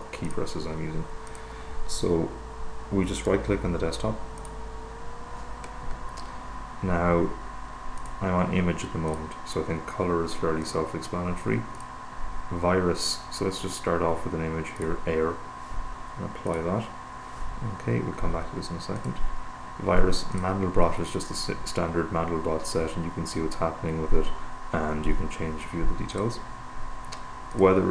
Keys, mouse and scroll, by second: 0.0 right click, 0.5 click, 1.5 click, 2.8-4.0 right drag, 4.7 click, 8.3 click, 9.3 click, 11.0 click, 12.0 click, 15.0 click, 16.8 click, 19.3 click, 20.7 click, 26.5 click, 27.8 click.